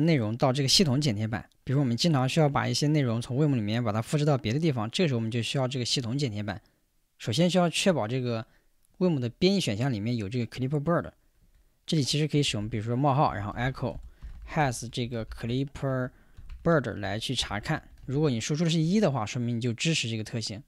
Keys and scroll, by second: 12.5-18.1 typing, 18.8 Return.